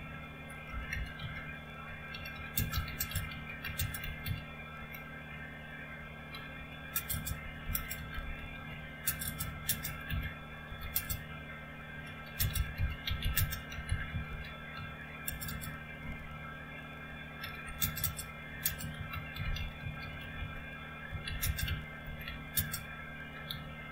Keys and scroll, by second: 0.0-4.7 typing, 6.3-16.1 typing, 17.3-23.9 typing.